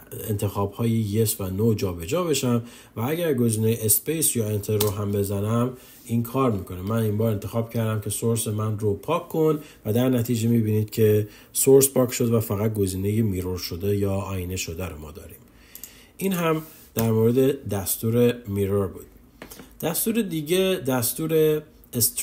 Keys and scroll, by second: 3.6 space.